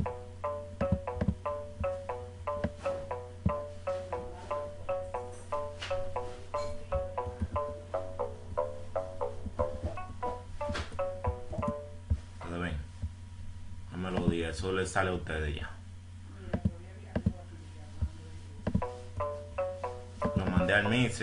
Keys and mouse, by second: 12.3 click, 13.2 click, 13.4 click, 13.8 F6, 15.7 click, 15.8 F1, 15.8 click, 15.9 click.